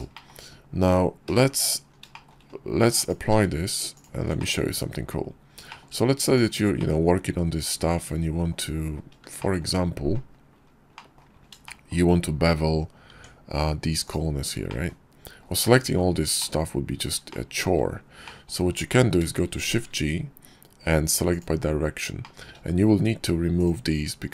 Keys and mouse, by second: 0.0 shift+drag, 0.3 KP_5, 1.1 h, 2.0 shift+drag, 2.8 click, 3.0 q, 4.2 click, 4.5 Tab, 5.5 shift+click, 6.2 click, 6.6 click, 7.4 middle click, 9.3 shift+middle click, 10.8 click, 11.5 shift+middle click, 12.9 Tab, 14.5 middle click, 15.2-16.2 middle drag, 16.2 click, 17.1 shift+middle click, 18.1 click, 19.5 shift+g, 22.1 click, 23.4 shift+click.